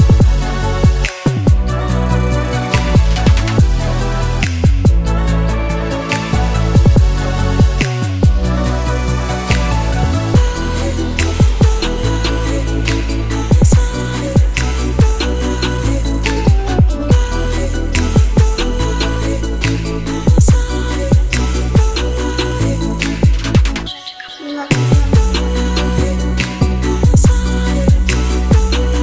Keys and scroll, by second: 19.9-23.7 typing.